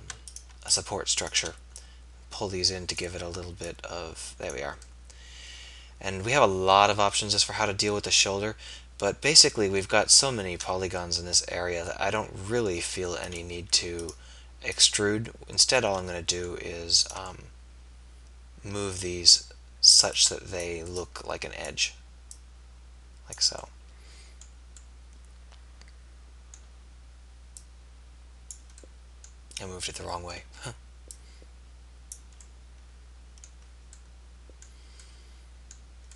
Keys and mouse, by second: 11.4-13.4 middle drag, 15.9 middle click, 17.7 middle click, 23.8-25.2 middle drag, 26.4-27.7 middle drag, 29.0 middle click.